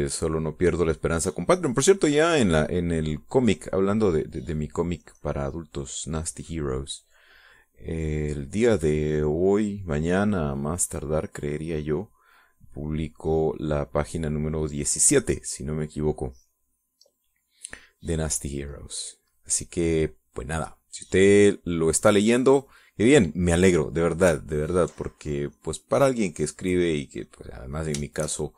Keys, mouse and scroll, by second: 5.8-14.8 drag, 16.0 click, 19.1-24.0 drag, 25.4 ctrl+click, 26.0-28.5 ctrl+drag.